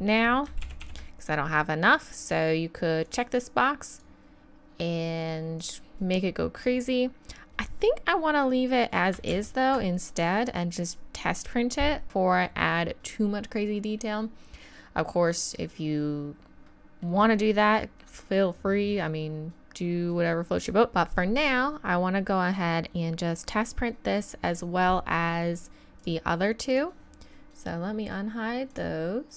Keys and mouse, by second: 0.6 ctrl+z, 0.8 ctrl+z, 9.4 ctrl+z, 14.0-15.2 middle drag, 15.3 middle click, 15.7 middle click, 15.9 middle click, 16.3 middle click, 16.5 middle click, 20.9 ctrl+z, 26.0-26.4 drag, 26.6 click.